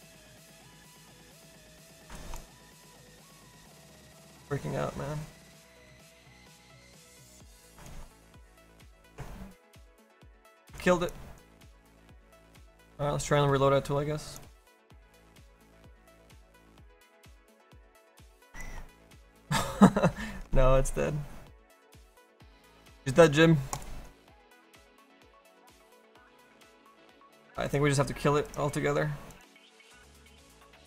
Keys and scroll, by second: 26.1 ctrl+shift+Escape.